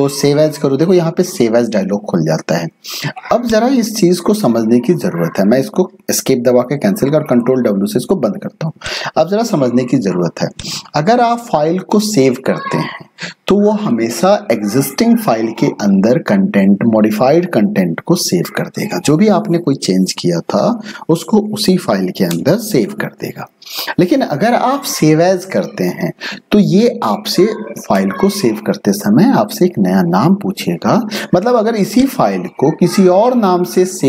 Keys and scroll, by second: 7.3 ctrl+w.